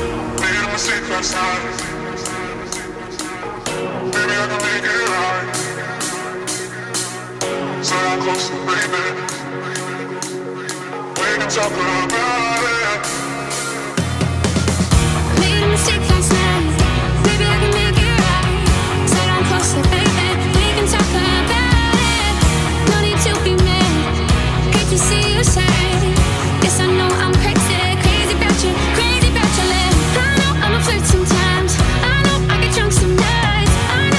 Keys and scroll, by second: 2.0 [, 11.3 ], 22.6 [, 23.0 [, 23.2 [, 23.3 [, 29.4 [, 32.3 ].